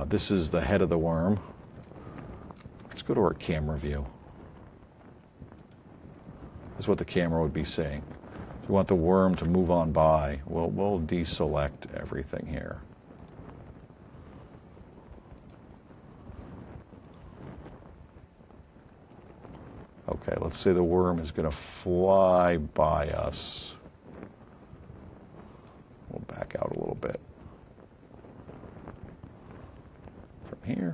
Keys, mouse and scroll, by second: 0.4 alt+click, 0.9 alt+scroll up 4, 1.5 alt+middle click, 11.6 click, 13.1 click, 17.7 middle click, 18.2 middle click, 19.0-19.7 alt+drag, 21.6-23.1 alt+drag, 23.5 alt+scroll up 1, 24.1-25.7 alt+drag, 26.0 alt+middle click, 26.3 alt+middle click, 26.5 alt+middle click, 30.7-30.9 alt+drag.